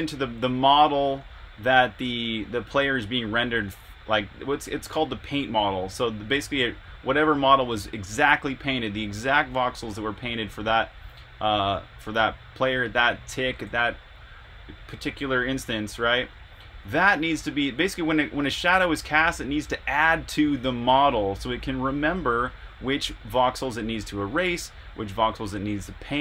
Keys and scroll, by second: 0.0-0.9 typing, 16.6-18.8 typing, 21.9 r, 24.7-25.5 typing.